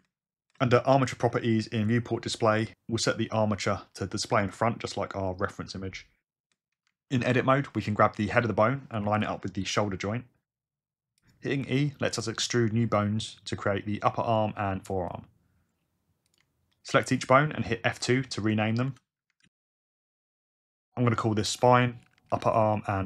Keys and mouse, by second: 1.2 g, 4.4 click, 7.3 Tab, 9.1 g, 9.1 y, 11.2 click, 13.4 e, 14.9 g, 15.1 click, 15.2 e, 16.3 click, 18.9 F2, 21.6 F2, 22.0 p.